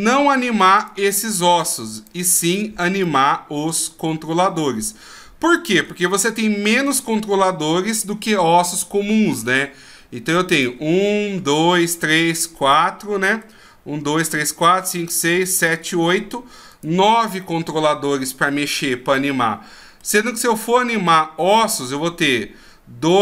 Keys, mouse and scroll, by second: 0.8 right click, 1.5 right click, 2.0 right click, 2.5 right click, 3.0 middle click, 10.5 right click, 12.7 middle click, 15.9 middle click, 16.7 right click, 17.4 middle click, 19.1 middle click, 20.2-20.8 scroll up 3.